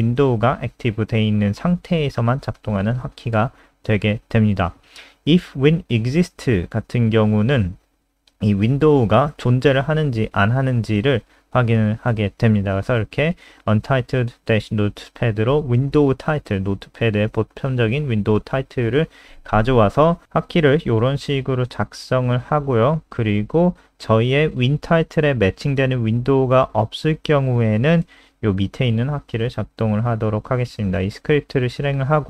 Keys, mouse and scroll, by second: 4.0-4.6 scroll down 2, 5.6-5.9 scroll down 1, 6.4 click, 7.4 ctrl+c, 7.5 click, 8.5 ctrl+v, 8.8 ctrl+s, 9.3 click, 18.4 click, 19.3 ctrl+c, 19.5 click, 19.9 Return, 20.1 ctrl+v, 20.2 ctrl+s, 21.6 click, 28.6 ctrl+alt+r, 30.2 click, 31.6 F5.